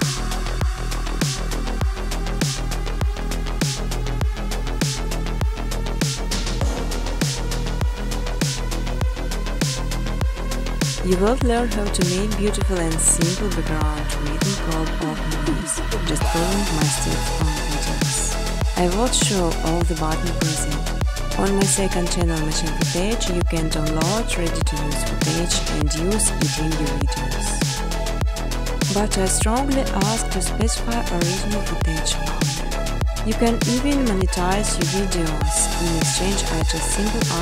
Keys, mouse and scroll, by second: 0.0 click, 0.2 click, 2.6 click, 4.3-5.4 typing, 6.8 Tab, 7.8 Tab, 8.9 Tab, 9.9-11.9 Tab, 13.5 Tab, 13.9 Tab, 14.3 Tab, 14.3 typing, 17.9 Tab, 19.9 -, 21.1-22.5 typing, 23.7 5, 23.8 Return, 25.8 click, 26.3-29.4 typing, 30.8 typing, 31.8 click, 34.0 click, 34.6 click.